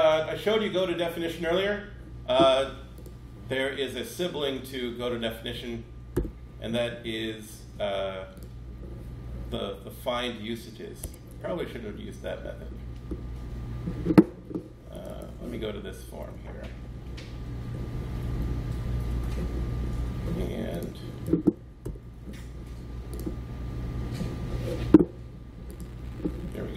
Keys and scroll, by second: 6.0 super+b, 10.9 Escape, 21.7 super+b.